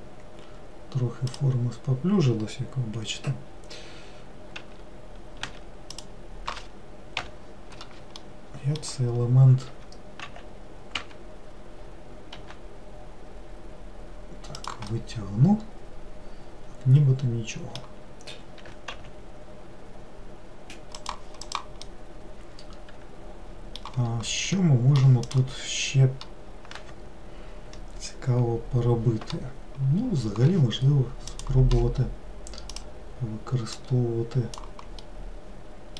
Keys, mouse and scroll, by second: 4.7 w, 5.5 w, 6.0 click, 7.2 l, 8.2-9.7 middle drag, 9.7 w, 10.3 x, 12.5 g, 15.0-18.1 middle drag, 18.7 g, 21.5 click, 21.9-27.8 middle drag, 31.4-32.9 drag, 33.8 click, 35.1-35.9 middle drag.